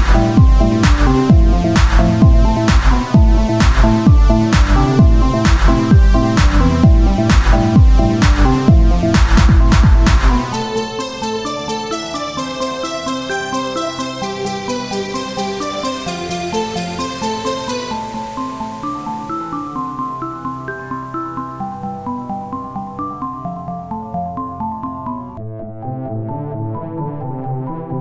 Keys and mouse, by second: 1.9 Tab, 6.5 Tab, 8.8 KP_Divide, 11.6 Tab, 12.3 ctrl+r, 14.4 ctrl+Tab, 19.4 z, 20.4 Tab, 22.6-26.4 drag, 26.7 Tab, 27.4 z, 27.9 ctrl+Tab.